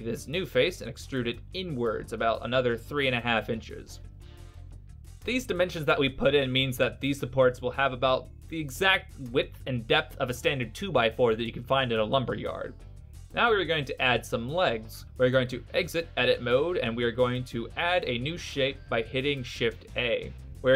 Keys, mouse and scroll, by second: 1.1 e, 4.1 click, 4.3 Right, 16.0 shift+a.